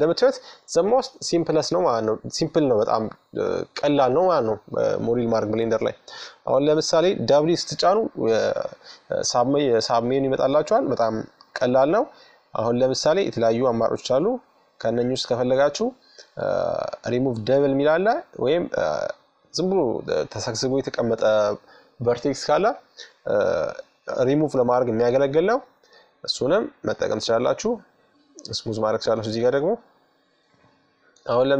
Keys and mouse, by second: 3.7 Tab, 4.8 w, 22.7-24.5 middle drag, 26.1-27.9 drag, 28.4-29.6 drag, 29.7 click, 30.5-31.5 middle drag.